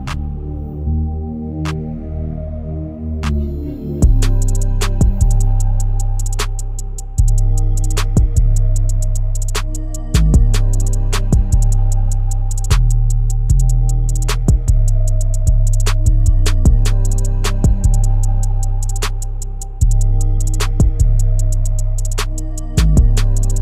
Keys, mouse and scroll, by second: 1.2 ctrl+r, 4.4 s, 6.9 ctrl+r, 8.2 s, 9.9 Tab, 10.3-10.7 shift+middle drag, 10.7 scroll up 2, 11.4 Tab, 11.7 Tab, 12.5 KP_Divide, 13.5-14.1 shift+middle drag, 14.1-14.5 scroll up 6, 14.5-15.0 shift+middle drag, 15.0-15.5 scroll up 5, 15.5 Tab, 16.2 ctrl+r, 19.9 Tab, 21.6 KP_Divide, 22.5 click, 22.8-23.6 scroll down 4.